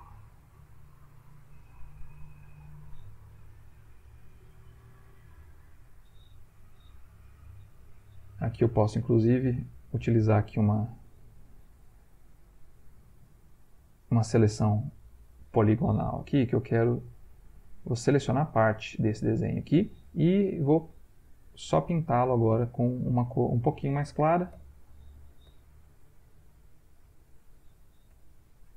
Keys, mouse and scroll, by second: 0.8 ctrl+click, 1.9 ctrl+z, 3.3 right click, 4.3 click, 7.9 ctrl+click, 9.4 click, 15.0 click, 16.1 click, 17.3 click, 17.8 click, 18.3 click, 18.9 click, 21.9-23.1 drag, 23.6 ctrl+click, 24.5 l, 25.0 click, 25.5 b, 27.1 ctrl+click, 28.1 l.